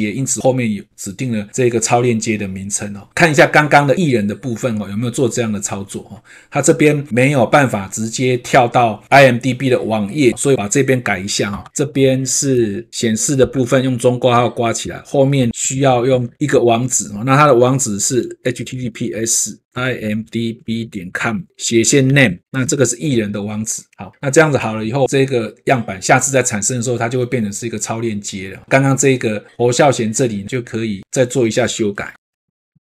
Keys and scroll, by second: 12.9 ctrl+c, 15.5 ctrl+v, 24.3 ctrl+s, 32.3 shift+Tab, 32.5 ctrl+c.